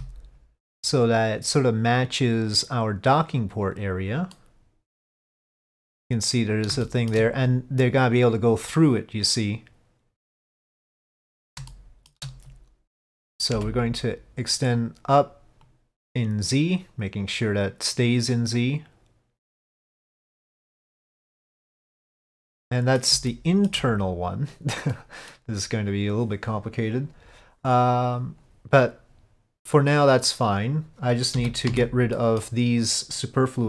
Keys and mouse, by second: 4.5-5.5 middle drag, 7.0 shift+middle click, 8.9-11.2 middle drag, 11.8 shift+middle click, 15.8-20.0 drag, 20.4-23.2 middle drag, 23.4 shift+middle click, 25.0 middle click, 32.3 middle click.